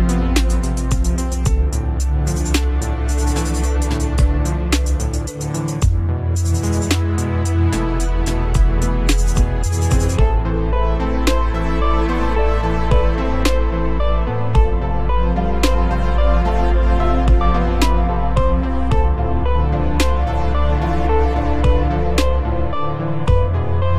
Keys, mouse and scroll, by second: 1.3 click, 3.3 click, 9.9 click, 10.5 click, 11.8 click, 11.8 right click, 12.3 click, 13.2 a, 13.7 w, 14.0 s, 15.5 s.